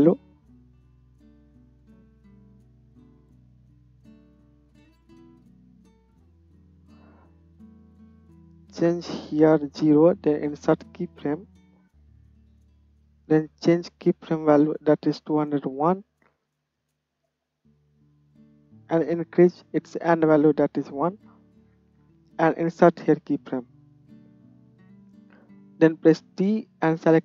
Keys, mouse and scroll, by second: 10.8 middle click, 11.1 click, 11.3-12.9 middle drag, 12.9-22.9 drag, 22.9-27.2 middle drag, 26.1 t.